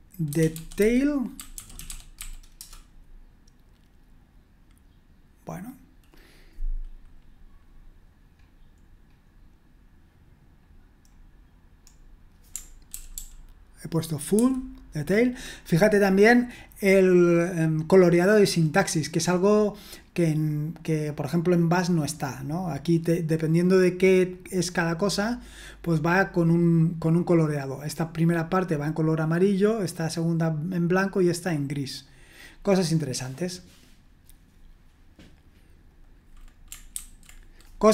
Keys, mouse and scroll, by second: 0.0-2.6 typing, 8.3-10.0 scroll down 1, 10.5-11.1 scroll down 1, 11.1-11.8 scroll down 1, 11.8-12.9 scroll down 1, 12.9 ctrl+p, 13.1 ctrl+p, 14.4 ctrl+n, 28.2-29.5 drag, 29.8-31.1 drag, 31.4 click, 32.4-33.4 scroll down 1, 33.8-35.3 scroll down 1, 35.9 click, 36.9 ctrl+c.